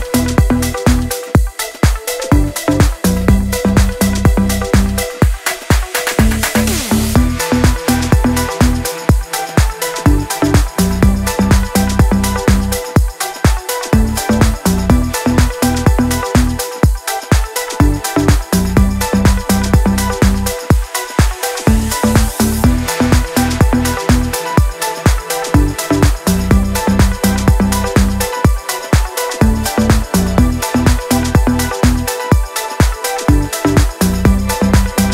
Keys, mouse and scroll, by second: 0.5 Up, 0.7 Left, 1.2 Up, 1.5 Right, 1.9 Down, 2.7 click, 2.8 scroll down 1, 3.1 scroll up 1, 3.5-4.0 click, 4.5 ctrl+], 7.0-7.4 ctrl+click, 9.0 alt+scroll down 1, 9.5 alt+click, 10.0 alt+scroll up 1, 10.5-10.8 click, 11.3-11.7 shift+click, 12.3-12.7 drag, 13.7 click, 16.3 click, 17.8 drag, 20.1 scroll down 1, 20.2-20.5 scroll up 1, 20.7 ctrl+z, 21.1 click, 23.9 click, 24.8 click, 27.2 ctrl+z, 27.7-31.5 drag, 33.0-33.6 alt+scroll up 1, 33.6 drag, 34.9-35.1 alt+drag.